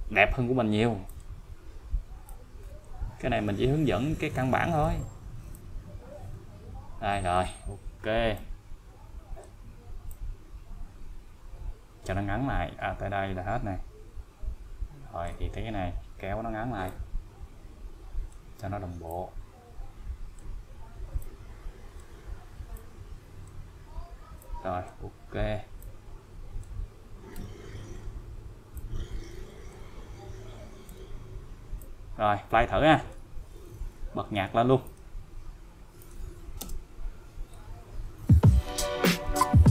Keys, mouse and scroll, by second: 1.1 click, 2.3-5.1 click, 8.3-9.6 click, 16.9-18.4 click, 24.4-25.0 click, 25.8-26.8 click, 27.3 n, 28.8-30.0 click, 30.9 n, 31.8-33.3 click, 33.3-34.2 scroll down 1, 34.9 click, 36.0 click, 36.6 space.